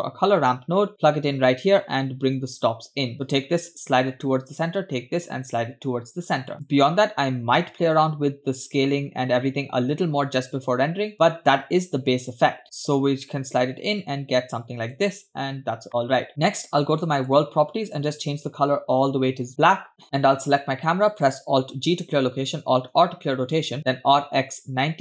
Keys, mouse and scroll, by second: 2.4-4.7 drag, 6.5 click, 6.7-11.1 drag, 13.5 click, 15.5-15.9 scroll down 3, 15.9 middle click, 17.2 click, 17.9 click, 19.9 middle click, 19.9 scroll down 1, 20.5 click, 22.2 alt+g, 23.0 alt+r, 23.9 r.